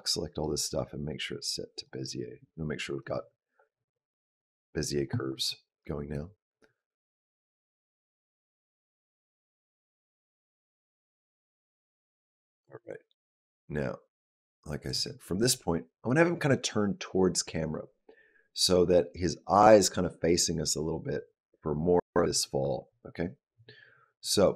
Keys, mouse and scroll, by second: 0.5 right click, 2.8 click, 6.1 click, 15.2 click, 15.9 click.